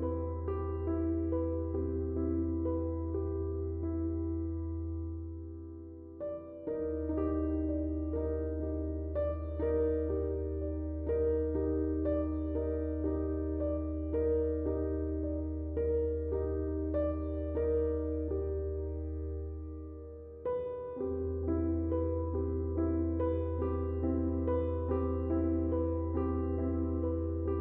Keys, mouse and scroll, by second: 16.3 click, 26.6 click.